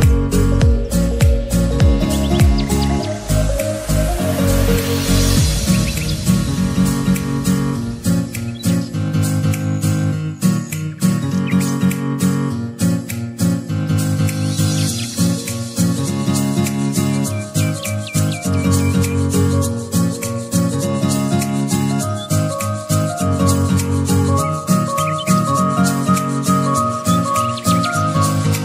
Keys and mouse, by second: 1.2 ctrl+t, 2.8 click, 5.7-7.7 alt+drag, 7.4 ctrl+z, 8.3 alt+click, 9.3 ctrl+z, 10.0-17.3 alt+shift+drag, 19.2 Down, 23.4 click, 24.3 ctrl+z, 25.5-28.6 drag.